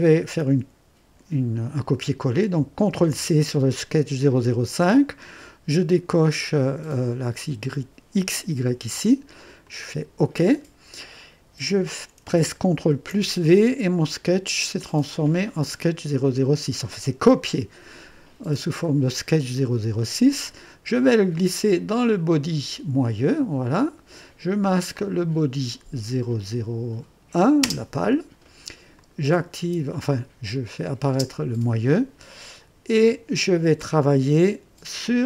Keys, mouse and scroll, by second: 2.9 ctrl+c, 6.7 click, 9.6 click, 12.9 ctrl+v, 20.3-23.0 drag, 24.9 click, 27.6 space, 28.9 click, 29.2 middle click, 31.1 space.